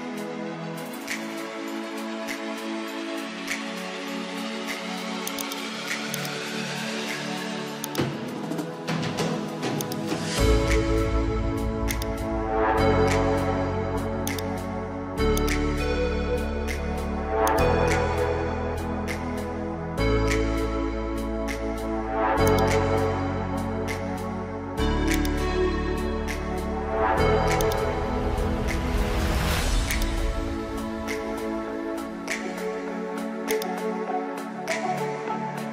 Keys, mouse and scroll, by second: 5.3 click, 18.2 ctrl+t, 22.5-26.6 drag, 26.9 alt+scroll up 1, 27.6-35.7 drag.